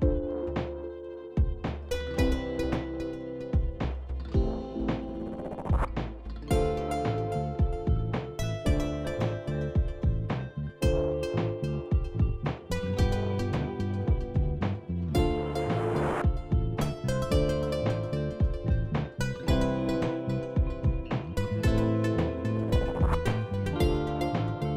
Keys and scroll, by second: 12.0 ctrl+z, 23.5 ctrl+s.